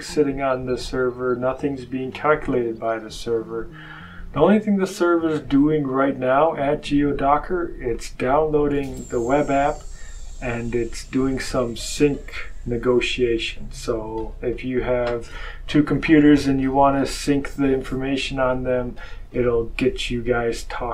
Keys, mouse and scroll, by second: 0.0-2.1 scroll up 6, 2.4-3.0 scroll up 2.